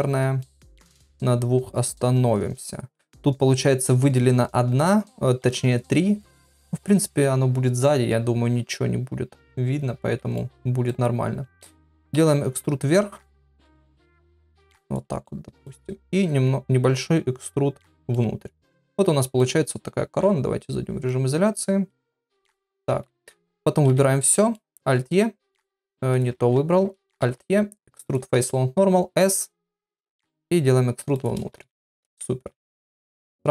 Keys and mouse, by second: 0.4-2.9 middle drag, 6.8 middle click, 10.4 middle click, 11.9 e, 15.2 middle click, 16.1 s, 18.1-19.4 middle drag, 20.2 KP_Divide, 21.0-22.7 middle drag, 23.9 a, 24.3 middle click, 24.8 alt+e, 26.4 ctrl+z, 27.2 alt+e, 31.6 Tab, 32.1 Tab.